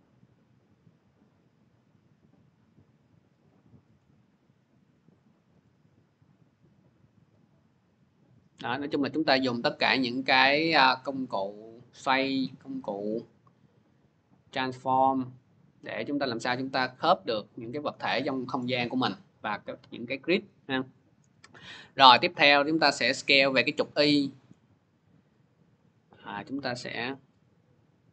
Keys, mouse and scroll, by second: 3.7-8.8 drag, 5.3 v, 9.5-14.6 drag, 15.9 click, 16.9-19.4 middle drag, 19.4 scroll, 23.5 middle click.